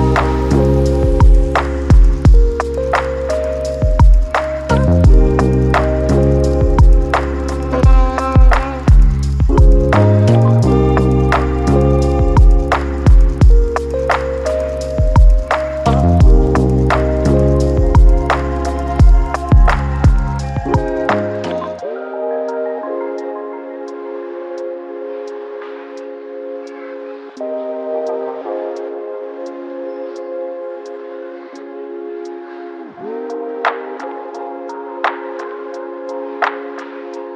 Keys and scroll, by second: 8.8-10.2 typing, 10.4 Return, 14.7-15.7 typing.